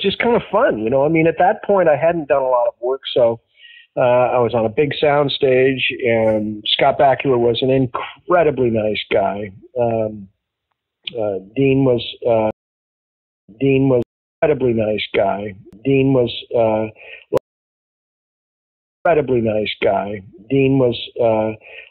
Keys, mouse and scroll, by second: 0.3 click, 1.6-2.6 drag, 3.0 click, 4.2 click, 5.4 click, 6.5 click, 6.9-8.9 drag, 9.3 click, 11.0-12.4 drag, 12.4 space, 13.1 ctrl+shift+Delete, 13.4 space, 13.9 space, 14.3 click, 14.3 space, 16.8 click, 17.3 space, 17.8 click, 18.9 click, 18.9 space, 21.1 ctrl+s.